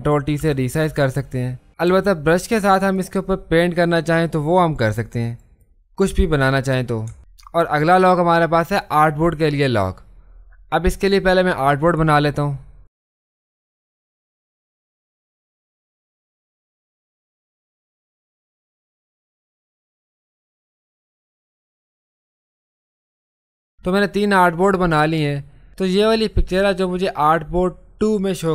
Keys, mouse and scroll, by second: 0.4 ctrl+t, 1.9 b, 2.9 click, 12.9 click, 13.4 ctrl+space, 13.4 ctrl+click, 14.3-16.0 drag, 16.0 space, 16.0 click, 16.2 space, 16.6-21.2 drag, 25.7 click.